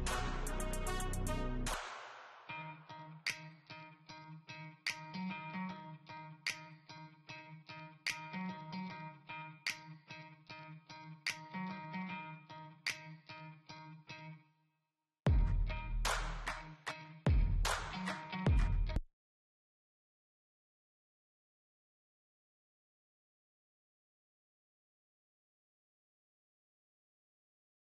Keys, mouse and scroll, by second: 8.5-9.7 typing.